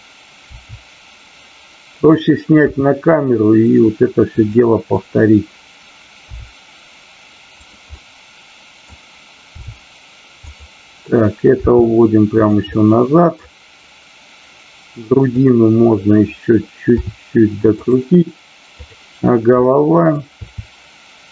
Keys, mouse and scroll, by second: 0.4 r, 2.1 click, 2.6 g, 6.4 r, 7.6 click, 7.8-8.9 middle drag, 9.4 r, 10.4 click, 11.5 g, 12.6 middle click, 15.4 click, 16.9 r, 17.9 drag, 18.7 click, 19.5 middle click, 20.3 r.